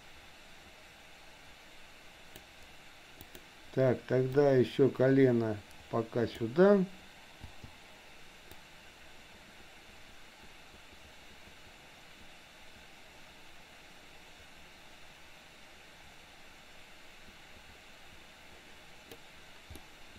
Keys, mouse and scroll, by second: 3.2 click, 4.6-6.6 drag, 7.4 i, 8.7-19.3 drag, 19.8 middle click.